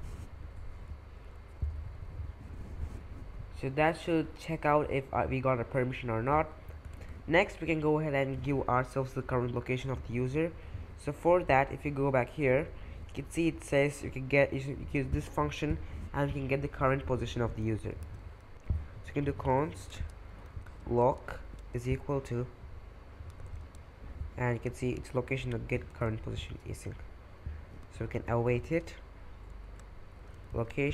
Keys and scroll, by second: 1.2-2.6 typing, 6.6-7.5 typing, 11.6 typing, 18.0 super+Tab, 19.0-21.7 typing, 23.4 super+Tab, 25.9 super+Tab, 27.4-30.9 typing.